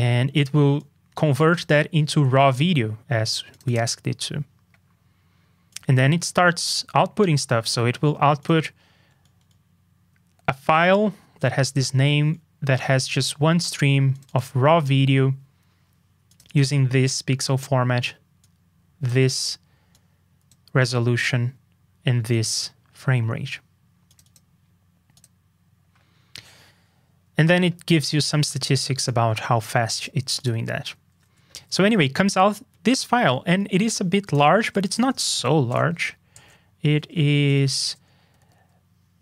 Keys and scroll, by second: 31.5 super+b, 38.3 super+b.